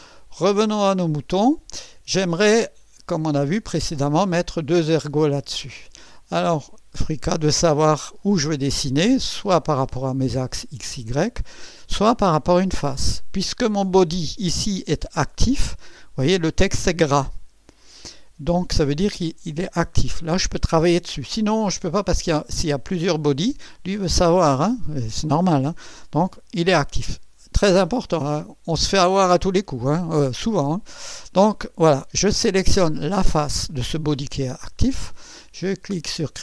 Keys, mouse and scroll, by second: 1.5 scroll down 1, 1.9 scroll up 1, 2.7 click, 5.7 click, 12.5 click, 32.2 click, 33.0 click.